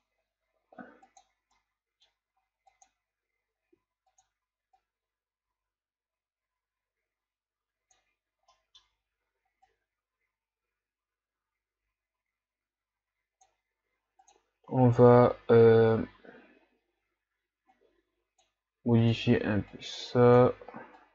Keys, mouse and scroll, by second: 1.5 click, 1.7-3.7 middle drag, 3.7-5.7 drag, 8.6-9.8 middle drag, 9.8-12.8 drag, 14.9 click.